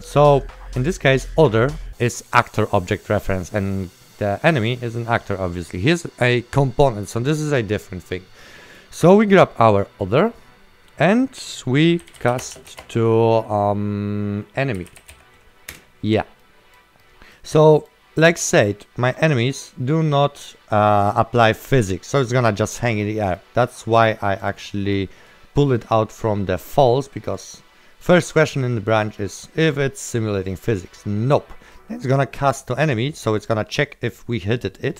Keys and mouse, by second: 0.2 click, 8.5 right click, 11.9 click, 12.0-12.8 typing, 14.9 e, 15.2 m, 15.9 KP_Enter, 16.5 right click, 18.7 right click, 21.8 click, 23.5 right click, 26.7 click, 28.1 right click, 28.6 click, 29.0 right click, 29.5 click, 31.6 right click, 33.6 click.